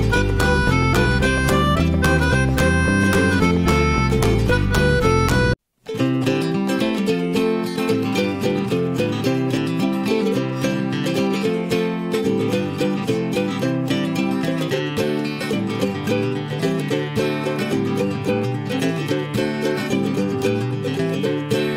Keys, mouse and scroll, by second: 1.5 middle click, 1.8 s, 7.1 middle click, 7.3-8.4 scroll up 5, 7.5 shift+middle drag, 7.9 drag, 8.4-9.5 middle drag, 9.5 click, 9.8 middle click, 9.9-10.5 scroll up 2, 10.1 shift+middle drag, 10.5 Tab, 11.5 a, 12.5 ctrl+b, 15.9 Tab, 16.2-16.6 middle drag, 16.6 drag, 17.1 drag, 17.6 click, 18.5 drag, 18.9 click, 19.3-20.4 middle drag, 20.4 click.